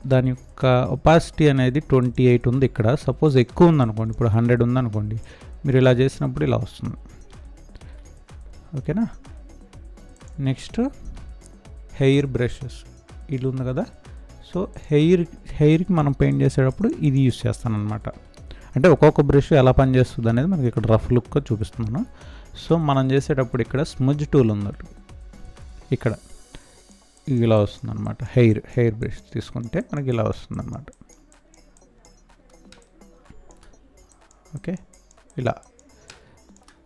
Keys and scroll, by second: 7.8 ctrl+z, 18.3 ctrl+z, 32.6 space, 36.0 space.